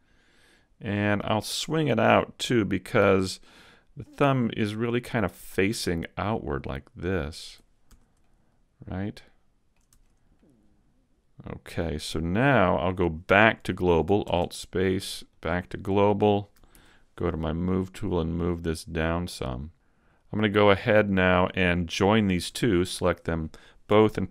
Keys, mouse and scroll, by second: 3.3 middle click, 5.1 click, 7.9 Tab, 8.2 middle click, 9.9 Tab, 10.3 middle click, 14.3 alt+space, 16.7 ctrl+alt+Left, 18.1 click, 19.6 middle click, 20.1-20.7 scroll up 1, 20.7-21.7 scroll up 1, 21.7 scroll up 1, 22.7 shift+right click.